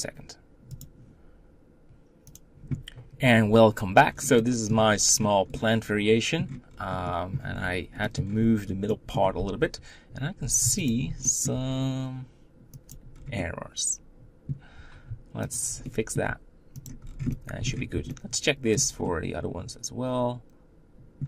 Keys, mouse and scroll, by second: 2.1 scroll down 4, 3.9 scroll down 3, 4.1 middle click, 4.5-4.9 scroll up 7, 5.3-6.4 middle drag, 6.4-6.8 scroll down 3, 6.8 middle click, 7.3-8.3 scroll up 8, 7.8 middle click, 8.8 middle click, 9.3 Tab, 10.6 alt+click, 11.1 middle click, 11.2 g, 12.8 scroll down 1, 13.1-15.3 middle drag, 15.3 alt+click, 15.6 middle click, 16.0 g, 16.8 scroll down 3, 17.0-21.2 middle drag.